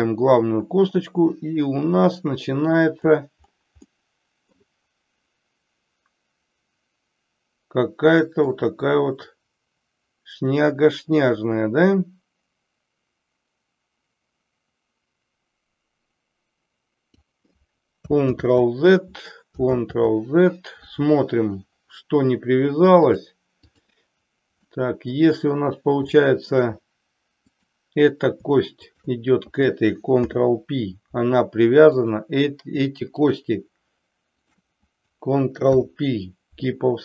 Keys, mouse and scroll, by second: 3.9 middle click, 8.5-17.4 drag, 18.2 ctrl+z, 19.7 ctrl+z, 23.0 click, 24.7 middle click, 26.2 shift+middle click, 27.5 click, 28.9 shift+click, 30.1 ctrl+p, 32.0 click, 33.2 shift+click, 35.6 ctrl+p.